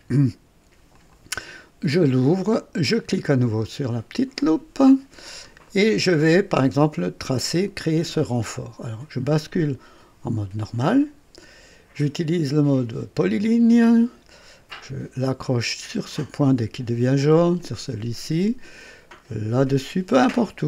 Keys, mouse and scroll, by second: 0.9 click, 3.8 click, 5.2-5.7 scroll up 4, 5.7 right click, 10.8 click, 13.6 click, 15.9 click, 17.5 click, 19.8 click.